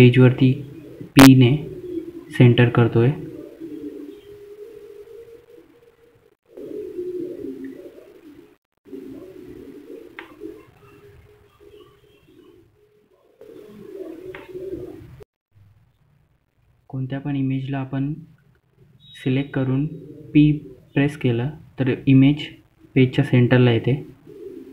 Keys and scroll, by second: 3.6 F3, 6.9 p, 8.4 shift+F2, 11.3 F3, 12.6 shift+F2, 19.1-19.5 typing, 20.3 Return.